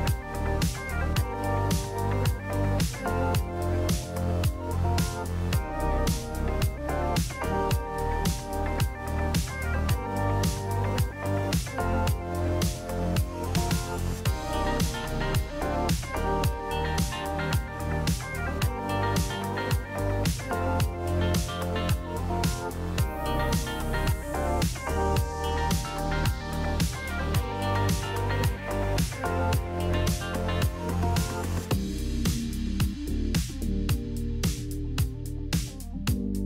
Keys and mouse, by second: 6.6 Tab, 7.9 middle click, 9.1 middle click, 10.6 Tab, 11.5 click, 12.7 KP_Decimal, 15.1 ctrl+click, 17.0-20.3 middle drag, 27.5 shift+click, 30.1 Tab, 31.0 middle click, 31.7 Tab, 32.5 a, 32.6 KP_Decimal, 33.0 Tab, 33.5 middle click, 35.0 shift+middle click.